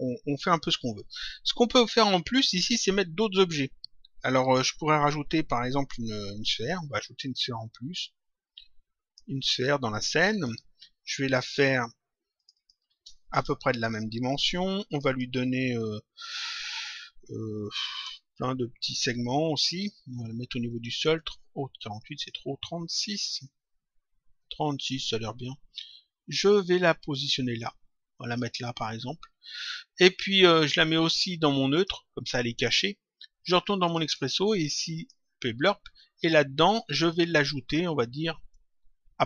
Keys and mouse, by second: 2.3 click, 7.1 click, 10.2 click, 12.3 click, 13.3 Return, 14.8 click, 18.0 Return, 20.7 click, 21.9 click, 23.3 Return, 26.4 click, 30.9 click, 33.8 click, 37.1 click, 38.4 click.